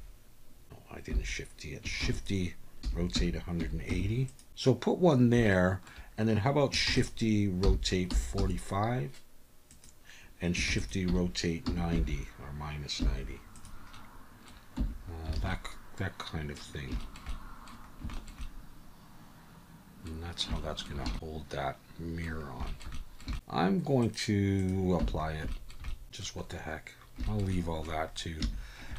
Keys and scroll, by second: 1.1 Escape, 2.0-3.9 typing, 6.9 shift+d, 7.6 r, 8.1 4, 8.4 5, 10.7 shift+d, 11.1 r, 11.6 9, 11.9 0, 13.0 -, 14.8 Tab, 15.3 alt+a, 25.0 Tab, 28.4 Tab.